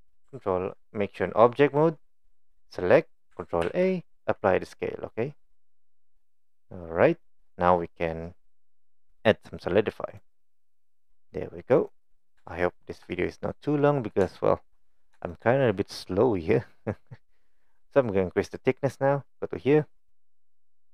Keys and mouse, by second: 2.1 click, 2.5 click, 3.6 ctrl+a, 5.9-7.3 middle drag, 10.1-11.9 drag, 12.5-12.9 shift+middle drag, 14.3 shift+middle click, 15.3-15.7 shift+middle drag.